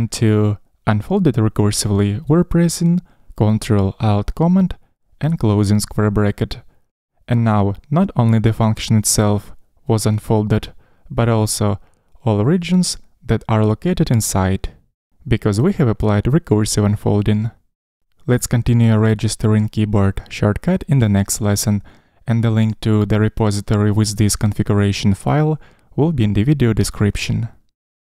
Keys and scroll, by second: 4.8 ctrl+alt+super+].